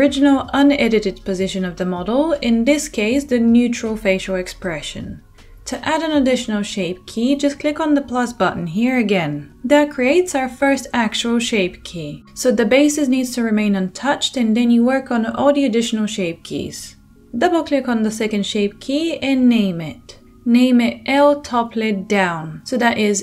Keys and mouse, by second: 2.0-17.6 drag, 17.6 middle click, 17.7-23.2 drag.